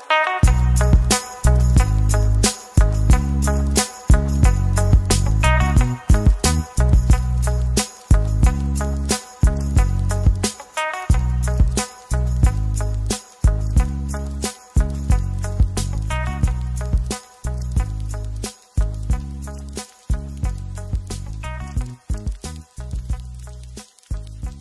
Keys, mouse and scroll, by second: 0.0-0.1 typing, 1.4 middle click, 4.3 middle click, 5.0 Tab, 5.2 middle click, 7.4 typing, 8.0 scroll up 1, 8.4 typing, 8.5 ctrl+b, 15.1 Tab, 15.4 middle click, 16.7 right click, 17.6 middle click, 19.4 Tab, 19.7-20.0 scroll down 1, 22.6-23.8 scroll down 1, 23.8 middle click.